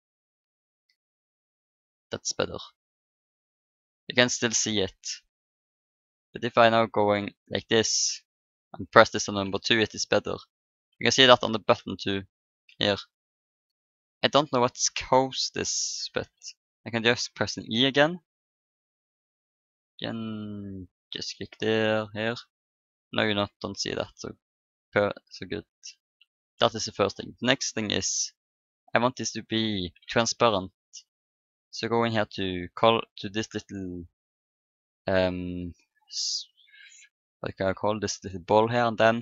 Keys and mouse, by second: 0.0 Tab, 3.5-4.9 middle drag, 6.1-8.9 drag, 8.1 middle click, 8.8 middle click, 10.9 Tab, 15.3 b, 17.3 i, 21.5 Tab, 24.8 middle click, 28.2-31.0 middle drag, 31.9-33.7 drag.